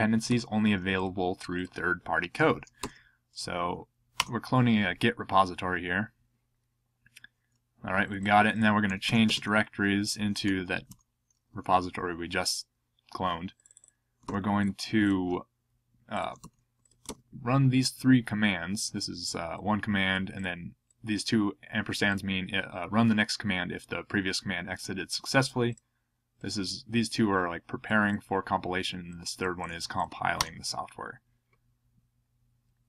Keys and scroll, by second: 0.3 super+c, 2.8 super+v, 4.2 Return, 8.6-10.7 typing, 10.9 Return, 14.2 super+c, 16.4 super+c, 17.1 super+v, 30.4 Return.